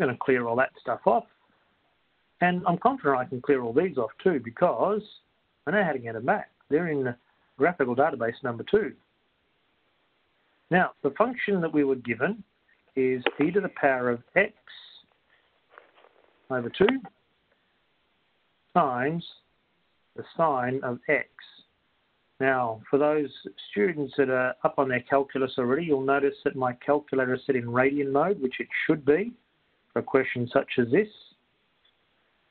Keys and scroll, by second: 5.5 Down, 25.0 Down, 25.3 Up.